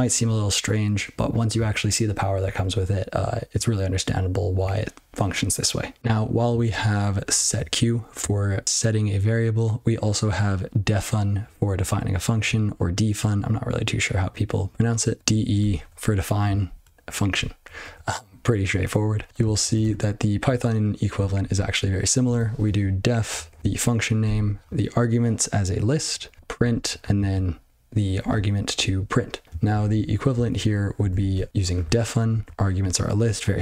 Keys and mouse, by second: 15.2 ctrl+b, 15.5 ctrl+f, 15.7 ctrl+f, 17.3 ctrl+f, 17.5 ctrl+f, 17.8 ctrl+f, 18.6-19.0 ctrl+f, 19.3 ctrl+p, 19.4 ctrl+n, 19.6 ctrl+n, 19.8 ctrl+k, 20.4 ctrl+/, 21.1-21.7 ctrl+f, 22.2 ctrl+a, 22.6 ctrl+f, 23.4 ctrl+alt+f, 23.6 ctrl+alt+f, 24.2 ctrl+alt+f, 26.3-26.6 ctrl+f, 27.1 ctrl+f, 29.4 ctrl+n, 29.6 ctrl+n, 29.9 ctrl+n, 30.3 ctrl+n, 30.5 ctrl+p, 30.9 ctrl+a, 31.3 Tab, 31.5-31.8 ctrl+f, 32.3 ctrl+b, 32.4 ctrl+f, 33.5 ctrl+f.